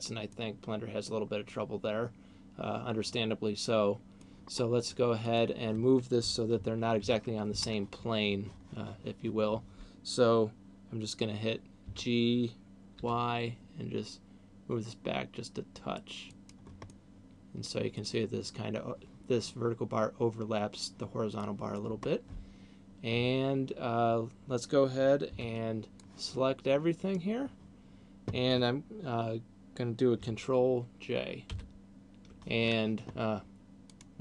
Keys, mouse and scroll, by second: 0.5 middle click, 4.5-5.3 scroll up 1, 5.3 middle click, 6.5 ctrl+KP_4, 6.8 ctrl+KP_4, 7.3 ctrl+KP_4, 11.8 g, 16.5 click, 17.0 middle click, 21.3 middle click, 22.8 scroll down 2, 25.5 b, 31.5 ctrl+j, 33.8 click.